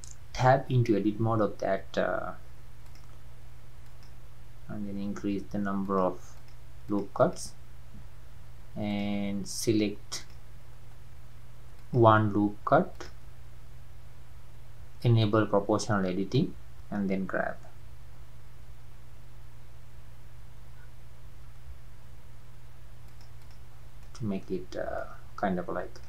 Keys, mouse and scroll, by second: 0.4 Tab, 0.9 scroll up 2, 2.8-10.3 drag, 11.8 alt+click, 12.9 alt+click, 16.0-16.4 scroll down 3, 16.4-18.2 middle drag, 18.2 g, 23.4 click, 23.8 scroll down 1, 24.0-24.7 middle drag, 24.7 scroll down 2, 25.0-26.0 middle drag.